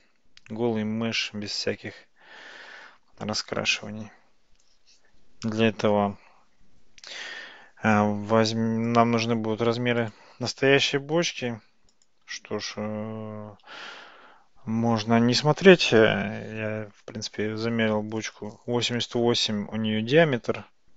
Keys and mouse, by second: 10.0 click, 11.4 x, 14.2 shift+a.